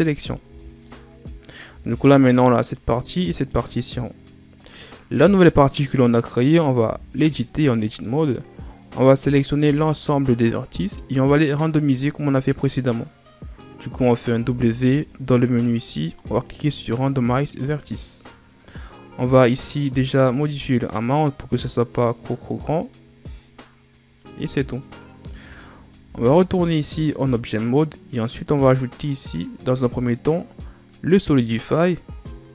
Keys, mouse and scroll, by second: 0.4 Tab, 0.8 middle click, 1.8 scroll down 3, 2.5 right click, 3.3 right click, 4.6-6.7 middle drag, 6.7 Tab, 8.0-9.0 middle drag, 9.0-9.6 scroll up 1, 9.6 a, 14.3 w, 19.7-22.8 drag, 25.9 Tab, 26.9-28.3 middle drag, 28.3-32.5 drag.